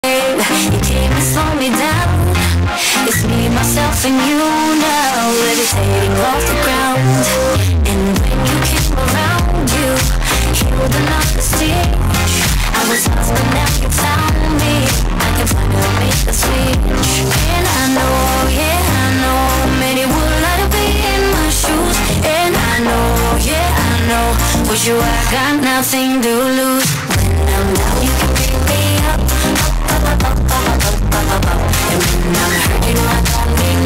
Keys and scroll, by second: 0.1 ctrl+q, 2.2 f, 2.7 Up, 2.9 Up, 3.2 Up, 21.5 Page_Down.